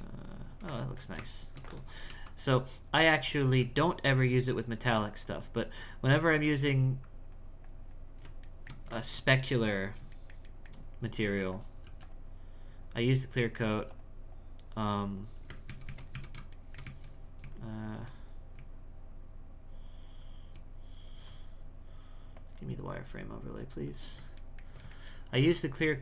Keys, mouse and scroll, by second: 0.8 ctrl+middle click, 2.6 click, 4.1-8.5 drag, 8.5-11.2 shift+middle drag, 11.2 f, 11.8 f, 12.8 click, 13.7 f, 14.3-15.7 drag, 15.7 ctrl+z, 15.9 ctrl+z, 16.6 shift+middle click, 16.8 z, 18.0 z, 20.5 z, 22.4-24.4 drag, 24.4-26.0 ctrl+middle drag.